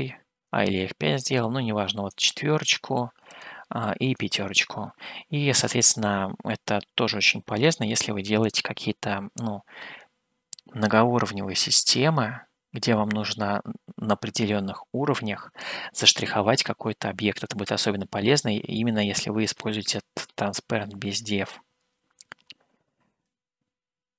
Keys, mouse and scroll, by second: 1.7-5.5 drag, 19.2 middle click.